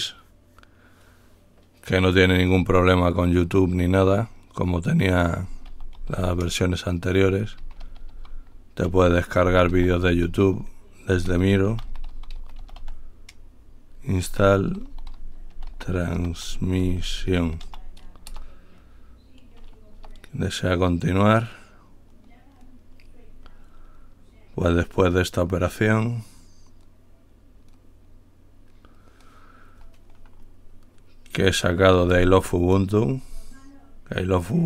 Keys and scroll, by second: 5.5-13.6 typing, 14.6-18.4 typing, 18.6 Return, 20.2 typing, 20.2 Return.